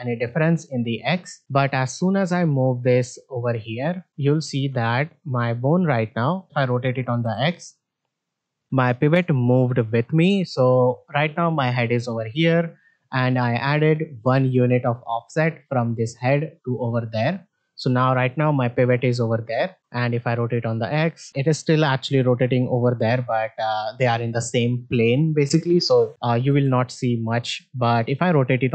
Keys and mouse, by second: 0.5 r, 1.4 middle click, 2.2-3.5 drag, 3.8 middle drag, 4.5 middle click, 4.8 shift+middle drag, 7.2 r, 10.5 middle click, 19.8 r, 26.4 r.